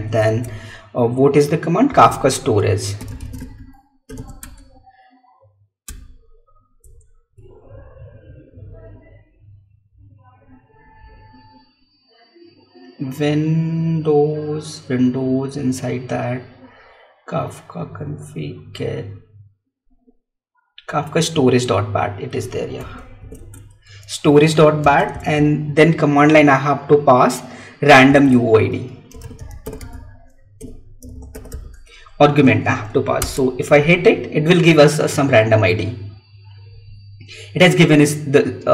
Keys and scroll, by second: 0.2 alt+Tab, 2.4 Tab, 4.5 Tab, 23.6 Tab, 25.0 space, 25.2 alt+Tab, 28.1 Tab.